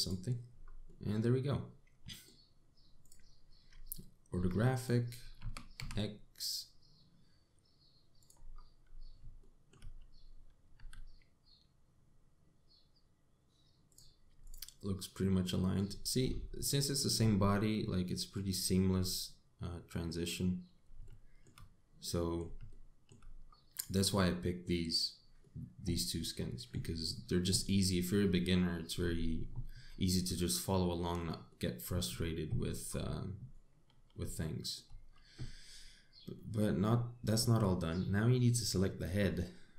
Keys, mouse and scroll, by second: 0.1 x, 1.2 scroll down 3, 1.5 middle click, 3.7 click, 4.3 scroll down 4, 5.0 Tab, 5.4 click, 6.0 g, 9.2-9.5 scroll up 8, 10.0 shift+middle click, 10.5 scroll up 4, 11.4 g, 15.1 click, 16.0 middle click, 16.5-17.2 scroll down 6, 17.2 middle click, 18.0-18.5 scroll down 3, 18.5 middle click, 19.2-19.6 scroll down 3, 19.6 middle click, 21.7 shift+middle click, 22.7 middle click, 23.3 shift+middle click, 24.1 scroll up 4, 24.6 middle click, 26.2 middle click, 28.1 middle click, 32.1 middle click, 35.0 shift+middle click, 35.7 scroll up 3, 36.4-37.0 scroll down 4, 37.0 middle click, 37.9 click.